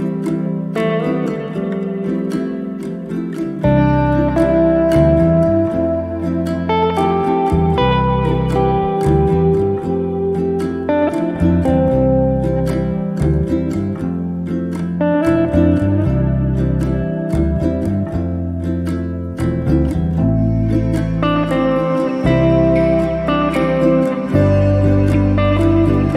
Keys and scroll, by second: 0.0-1.4 typing, 7.6 p, 9.0-10.5 typing.